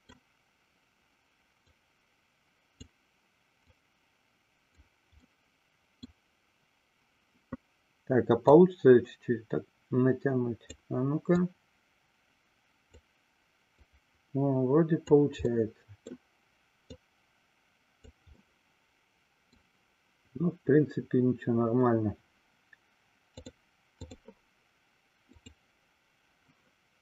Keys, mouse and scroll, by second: 1.7-3.1 drag, 3.8-5.0 drag, 5.4 middle click, 8.7-10.9 drag, 11.4-13.2 drag, 13.9-15.3 drag, 15.7 middle click, 17.2-18.3 drag, 18.7 middle click, 23.5 click.